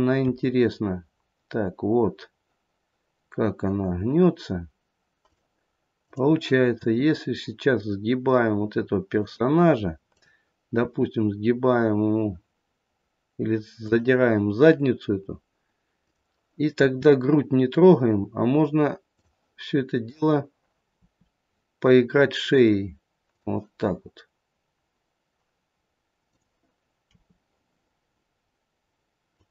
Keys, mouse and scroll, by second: 1.9 r, 5.9 click, 6.7 r, 10.0 click, 10.8 r, 15.9 click, 16.6 r, 20.0 click, 20.9 r, 26.2 click, 26.9 r.